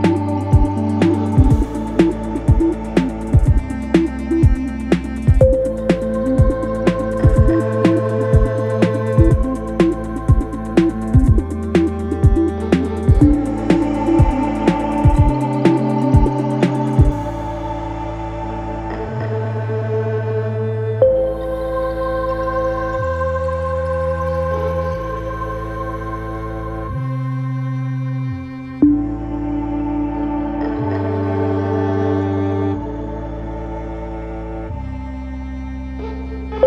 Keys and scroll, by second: 6.8 ], 11.2 ctrl+z, 16.3 4, 22.9 2, 30.6 4, 32.7 3.